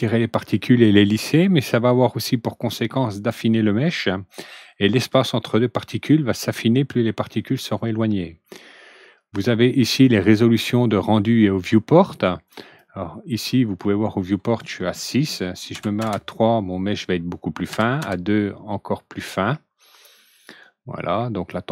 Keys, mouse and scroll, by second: 12.4 click, 15.7 ctrl+n, 17.6 ctrl+n.